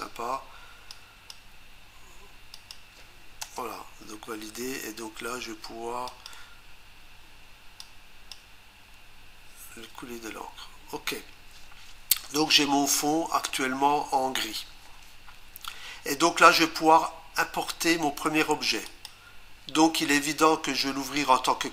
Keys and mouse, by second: 0.9 click, 2.6 click, 3.4 Return, 6.1 click, 7.8 click, 18.9 click.